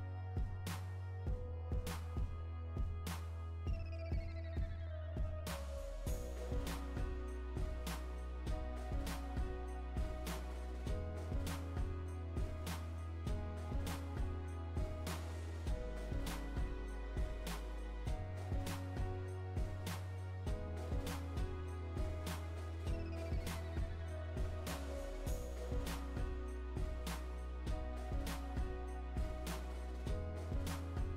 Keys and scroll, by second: 3.7 Right, 13.2 Right, 21.0 Right, 27.2 Right.